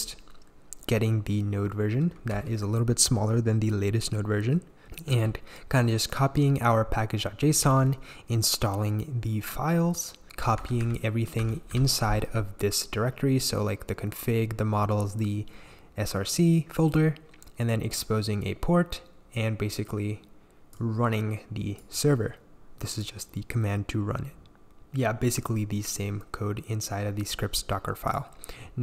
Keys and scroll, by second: 2.3 l, 5.1 j, 7.6 j, 10.6 h, 10.8 h, 11.4 l, 11.7 l.